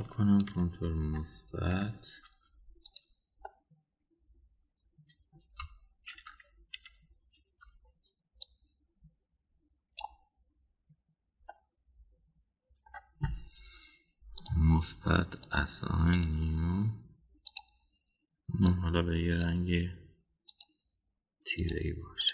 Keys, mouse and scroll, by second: 0.1 click, 1.5 ctrl+KP_Add, 2.0 ctrl+KP_Add, 3.8 click, 4.5-6.4 middle drag, 7.1 KP_1, 7.7 KP_3, 9.4-11.1 drag, 12.5-13.9 middle drag, 15.4 drag, 16.5 drag, 17.1 click, 18.5 click.